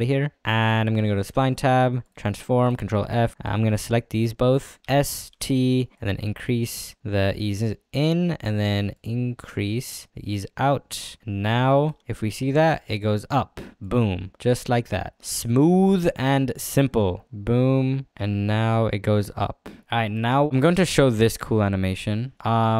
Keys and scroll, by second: 3.1 ctrl+f, 4.8 s, 5.3 t, 12.0 space, 16.1 space.